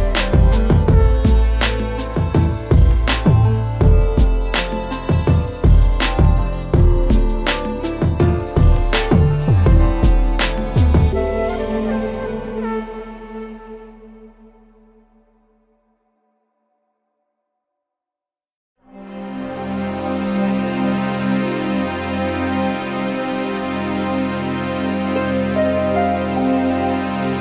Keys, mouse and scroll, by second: 0.0-0.2 typing, 1.0 click, 2.1 click, 2.5-3.6 typing, 4.2 scroll, 4.9 scroll, 5.7 scroll down 1, 5.8-6.3 scroll down 3, 6.4 a, 7.6 click, 8.0 scroll down 4, 8.3 middle click, 11.8 click, 11.9 middle click, 12.0 middle click, 12.0 middle click, 13.1 middle click, 13.2 middle click, 13.3-13.9 scroll, 14.3 click, 14.8 3, 14.9 Return, 15.8-16.2 scroll, 16.1 3, 16.8 click, 18.3 click, 19.0 click, 20.6-22.1 alt+scroll, 21.0 alt+middle click, 21.2 middle click, 21.5 alt+middle click, 23.7 click, 24.2 middle click, 24.2 middle click, 26.0 alt+middle click, 26.1 alt+middle click, 27.0 click, 27.1 scroll.